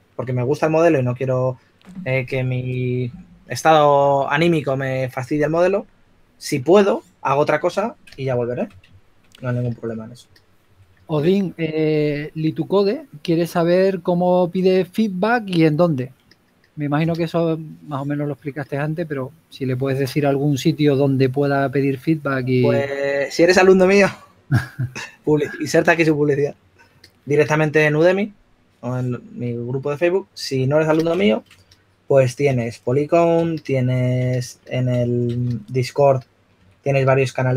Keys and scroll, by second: 12.6-13.9 typing, 20.2 4, 35.6-37.4 typing.